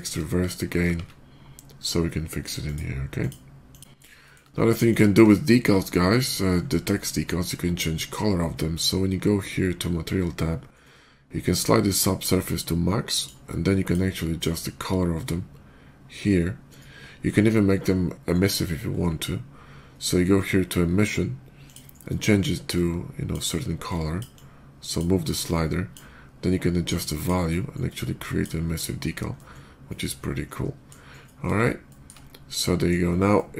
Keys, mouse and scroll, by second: 2.5 ctrl+`, 2.5 click, 3.0 click, 3.5 click, 3.7 shift+middle click, 4.1 shift+middle click, 4.7 shift+click, 5.3 shift+middle drag, 6.3 shift+middle drag, 6.5 shift+middle click, 6.6 shift+middle click, 6.8 shift+middle click, 7.0 shift+middle click, 8.2 middle click, 8.8 middle click, 11.8-13.1 drag, 13.7 click, 14.2-18.0 drag, 18.7 middle click, 21.5 click, 22.6 click, 23.7 click, 24.2 click, 25.3 click, 26.7 click, 27.3 click, 28.6 click, 28.9 scroll down 1, 29.2-30.7 middle drag, 31.0 middle click, 31.7 shift+middle drag, 32.4-32.7 shift+middle drag, 33.2-33.5 shift+middle drag.